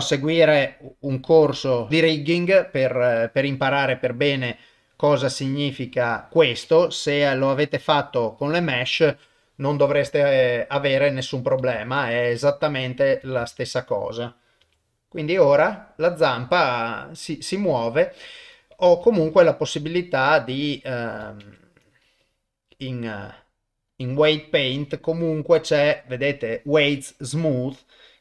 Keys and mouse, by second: 0.4 click, 0.6 click, 1.1 click, 1.5 click, 1.8 click, 4.8 middle click, 5.9-7.4 drag, 7.9 click, 8.4 click, 10.9 ctrl+Tab, 11.7 ctrl+Tab, 12.9 click, 13.4 ctrl+Tab, 13.7 click, 14.6 r, 19.2 ctrl+Tab, 19.7 click, 21.4 ctrl+Tab, 25.2-27.5 drag.